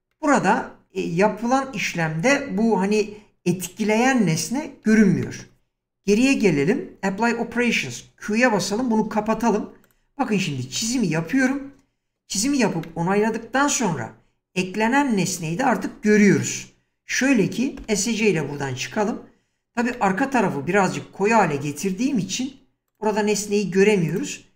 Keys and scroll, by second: 4.9 ctrl+z, 6.1 1, 9.1 q, 17.8 Escape.